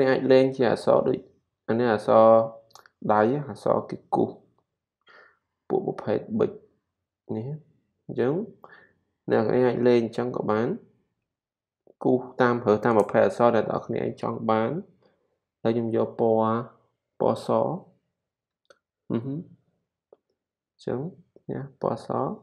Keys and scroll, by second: 5.2 super+=.